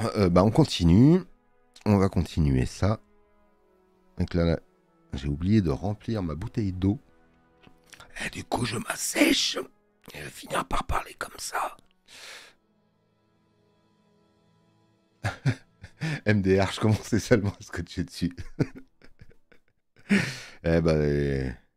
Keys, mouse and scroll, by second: 7.0 click.